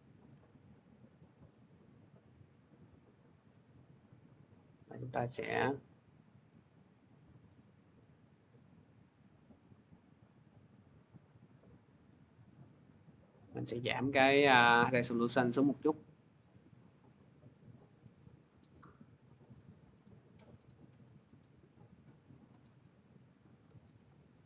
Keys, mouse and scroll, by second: 0.2 click, 0.5 3, 1.1 click, 8.3 click, 12.2 click, 23.2 shift+click, 23.9 ctrl+z.